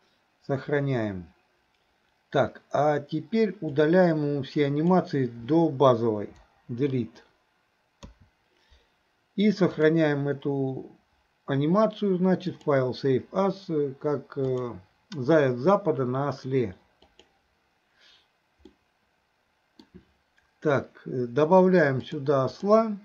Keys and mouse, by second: 3.8-5.0 drag, 6.7 Delete, 8.1 a, 9.8-12.9 drag, 18.7-19.9 middle drag, 22.0-22.8 drag.